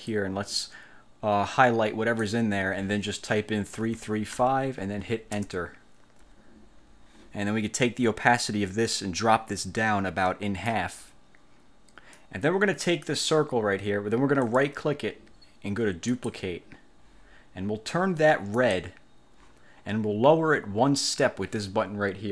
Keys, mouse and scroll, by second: 0.3-2.5 drag, 3.9 3, 4.5 5, 5.5 Return, 9.1-11.0 drag, 12.3 click, 14.6 click, 16.2 click, 18.7 click.